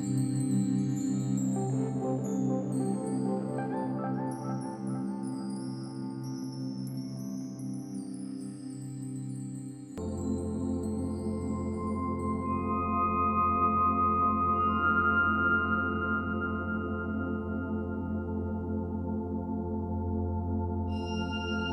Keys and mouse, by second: 2.9 click, 4.2 alt+click, 5.0-5.4 alt+shift+drag, 5.6-6.6 ctrl+alt+drag, 6.8-9.5 ctrl+alt+drag, 9.9 ctrl+alt+KP_0, 11.5-12.2 typing, 14.0-15.7 alt+drag, 15.5-15.9 typing, 16.9-17.8 drag, 18.0 g, 18.4 z, 19.1-20.3 drag, 19.7 typing, 21.5-21.7 alt+drag.